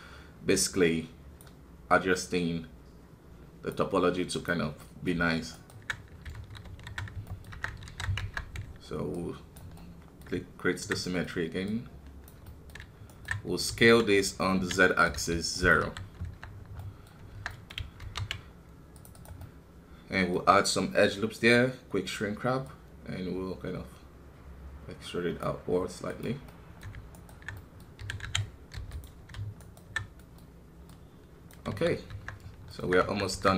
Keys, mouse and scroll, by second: 4.8-6.6 middle drag, 6.6 alt+KP_2, 7.2 middle click, 7.5 Tab, 9.1 click, 9.8-11.6 middle drag, 11.6 click, 12.5-13.6 middle drag, 13.6 s, 15.8 KP_1, 16.2 Tab, 16.5 scroll down 2, 16.8 middle click, 17.1 scroll up 3, 17.3 Tab, 17.5 middle click, 18.0 ctrl+r, 19.4-24.3 middle drag, 24.3-26.5 drag, 26.5-28.0 middle drag, 28.0 s, 29.6-31.7 alt+right drag, 31.7 KP_1, 32.1 Tab, 32.4 scroll down 1, 32.7 middle click, 32.8 Tab.